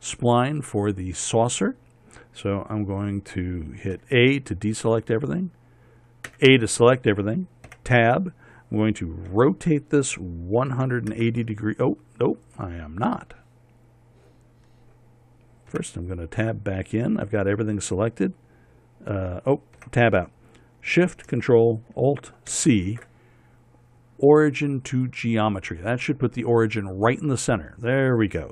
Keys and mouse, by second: 4.5 a, 6.8 a, 8.2 Tab, 9.9 r, 16.3 Tab, 20.3 Tab, 23.1 ctrl+alt+shift+c.